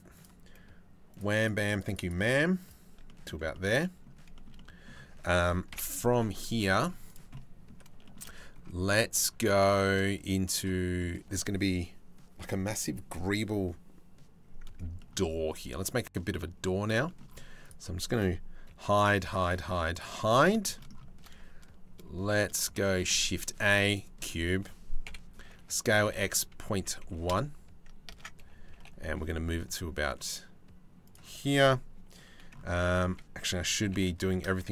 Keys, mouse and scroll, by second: 0.8 middle click, 1.0 middle click, 1.4 middle click, 2.3 click, 2.7 middle click, 3.2 click, 4.0 shift+middle click, 4.2 click, 5.4 KP_7, 6.0 middle click, 7.0 middle click, 8.2-9.2 middle drag, 9.4 shift+middle click, 10.6 middle click, 14.5 shift+middle click, 15.9 middle click, 16.6 shift+middle click, 17.2 click, 18.3 h, 18.5 click, 18.8 h, 19.0 click, 19.2 h, 19.7 h, 19.9 middle click, 20.2 shift+middle click, 22.4 shift+a, 24.6 KP_7, 24.9 Tab, 25.5 s, 27.7 Tab, 28.3 g, 32.4 Tab, 32.6 a, 33.4 g.